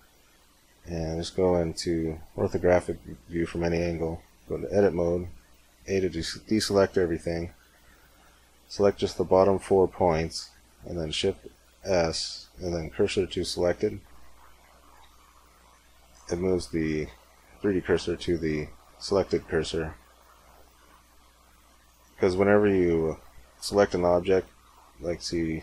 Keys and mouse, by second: 0.7 KP_1, 1.3 KP_5, 2.2 z, 3.7 Tab, 4.8 a, 7.3 b, 11.0 shift+s, 22.2 a, 23.5 b, 24.9 c.